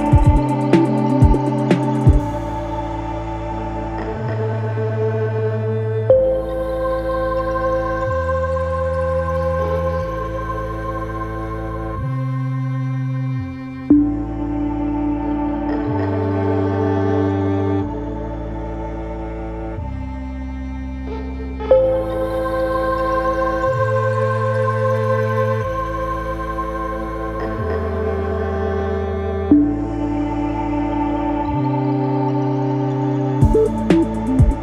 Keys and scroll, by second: 9.4 Delete, 11.9 F1, 12.1 F2, 13.3 F9, 31.5 ].